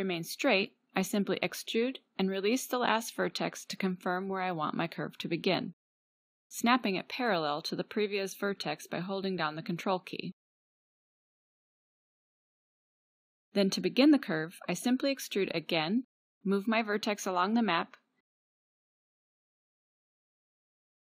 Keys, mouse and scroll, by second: 1.1 a, 1.3 a, 2.4 g, 4.0 click, 4.8 e, 12.0-14.1 drag, 14.1-15.2 middle drag, 15.2 e, 16.3 middle click.